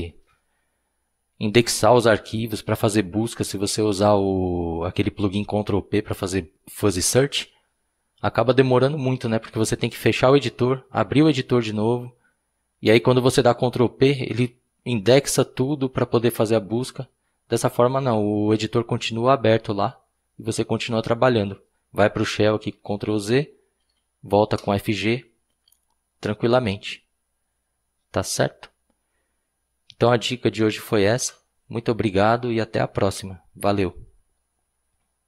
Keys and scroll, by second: 22.7 ctrl+z, 24.2-25.1 typing.